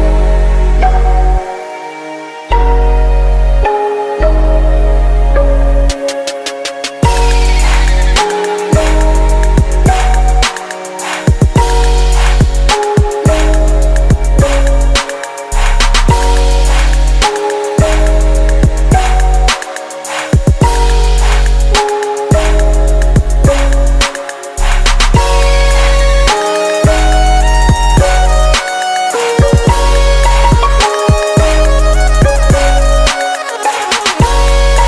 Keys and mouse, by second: 1.2-2.5 right drag, 3.7 space, 12.1 click, 12.5-15.6 right drag, 15.6 space, 25.1-26.8 right drag, 27.3-28.5 right drag, 28.0 space, 32.8-34.8 right drag.